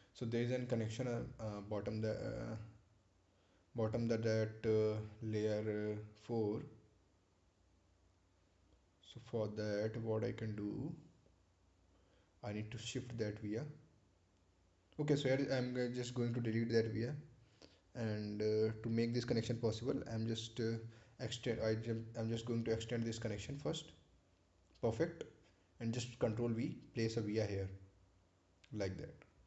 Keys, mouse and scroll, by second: 2.4 right click, 3.4 click, 6.6-7.1 scroll up 1, 9.1 click, 15.4 Delete, 16.3-16.7 scroll down 1, 21.4 click, 26.9 ctrl+v.